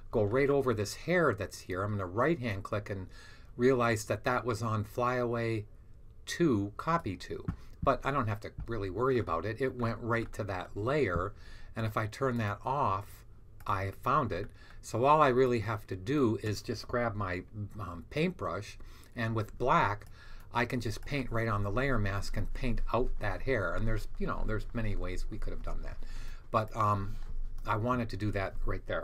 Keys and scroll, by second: 17.5 b.